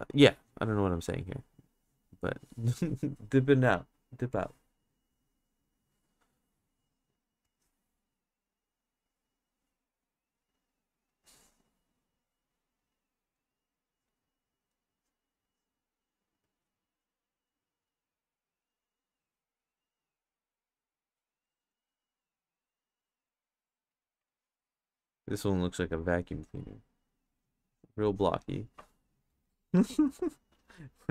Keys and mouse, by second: 0.1-2.3 drag, 5.3 click, 7.5-9.6 drag, 9.8 click, 10.3 click, 10.6 click, 13.1 click, 13.4 click, 13.9 click, 14.5 click, 14.9 click, 15.5 click, 16.1 click, 16.9 click, 17.9 click, 19.1 click, 20.4 click, 21.4 click, 21.7 click, 22.0 click, 22.6 click, 23.4 click, 24.0 click, 25.4 click, 26.1 click, 27.3 click, 28.1 click, 28.5 click.